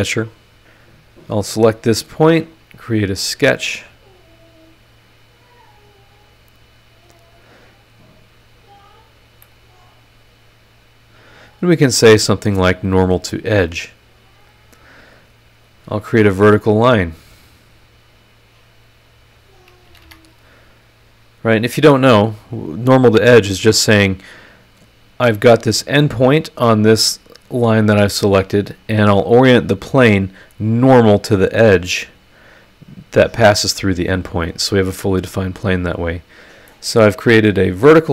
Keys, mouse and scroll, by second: 1.4 click, 3.0 click, 5.1 click, 5.7 click, 7.6 click, 8.4 click, 9.2 scroll down 2, 9.4-12.8 middle drag, 13.1 scroll up 2, 15.6 click, 17.8 click, 19.1 click, 19.8 Escape, 20.9-22.3 drag, 35.7 click, 36.7 middle click, 36.7-38.0 right drag, 36.7-38.0 drag.